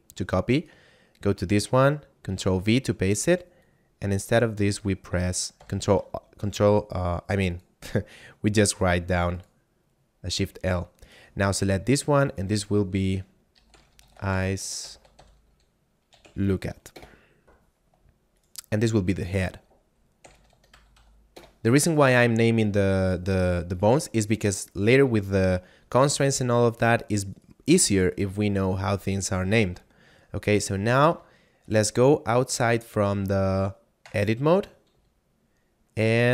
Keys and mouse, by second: 0.5 right click, 2.3 ctrl+v, 3.3 click, 5.3 shift+l, 7.5 click, 10.6 right click, 12.3 click, 13.4-16.3 typing, 16.9 Return, 18.4 right click, 19.3 click, 20.3 h, 20.4 e, 20.5 a, 20.8 d, 21.4 Return, 23.0 right click, 27.3 right click, 29.6 a, 30.4 middle click, 31.3 shift+middle click, 34.1 Tab, 34.8 z.